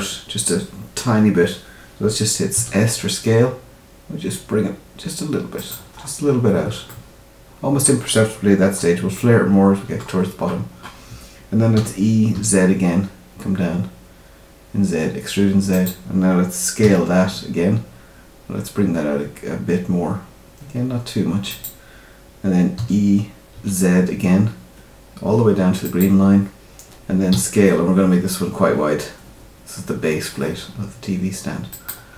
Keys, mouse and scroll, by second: 2.5 s, 5.9-6.2 scroll up 3, 6.8 ctrl+middle click, 8.5-8.9 scroll down 2, 9.1 shift+middle click, 10.5 scroll up 1, 11.7 e, 16.8 s, 22.7 e, 27.3 s.